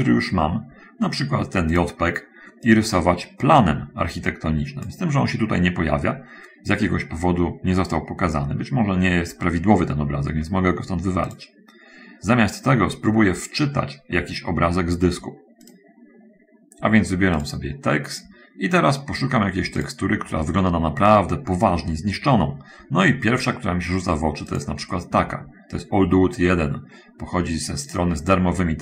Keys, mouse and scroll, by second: 3.0-5.0 drag, 11.6 click, 16.0 click, 17.8 click, 19.9 click, 24.5 click, 28.2 click.